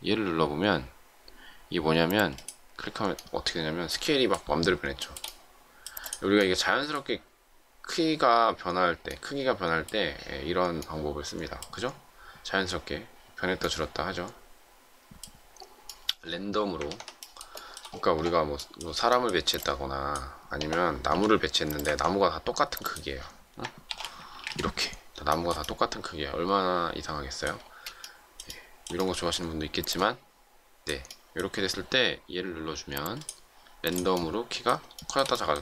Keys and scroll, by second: 16.8 ctrl+z, 21.0 m, 23.8 shift+8, 24.2 3, 24.4 Return, 27.5 space.